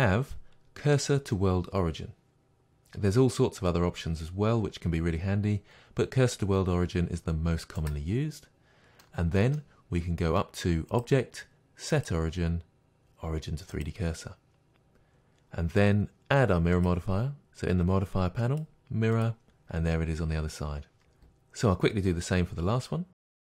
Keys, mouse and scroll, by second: 10.9-23.3 drag.